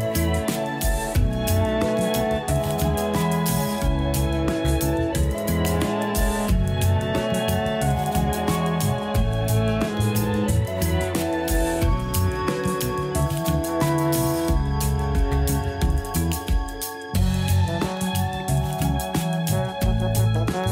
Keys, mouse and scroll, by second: 7.2-10.3 drag, 12.9-16.1 middle drag.